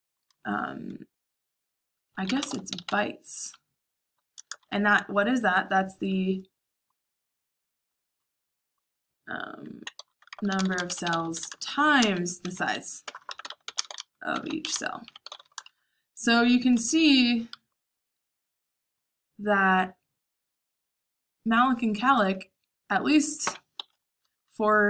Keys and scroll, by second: 0.2-0.9 typing, 2.0-3.2 typing, 4.3-5.1 typing, 9.4-11.5 typing, 14.3-17.5 typing, 16.7 Escape, 23.7 Escape, 24.2 k, 24.4 j.